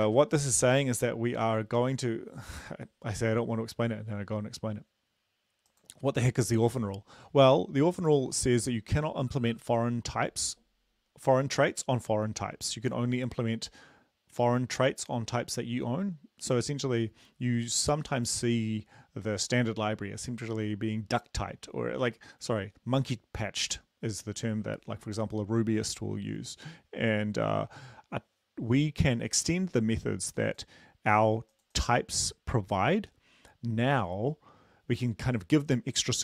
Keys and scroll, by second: 0.1 ctrl+`.